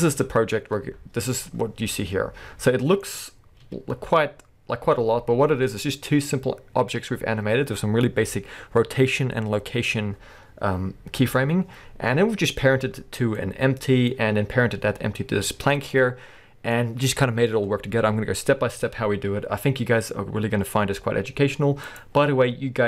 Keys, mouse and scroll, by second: 1.4 middle click, 3.6 KP_1, 15.9 middle click.